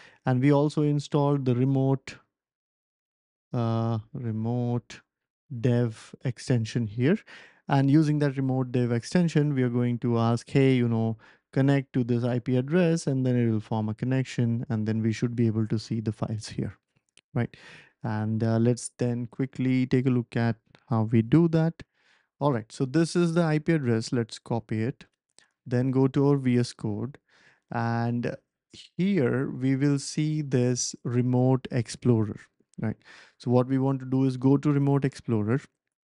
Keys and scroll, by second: 19.2 BackSpace, 21.0 typing, 23.1 ctrl+alt+super+p.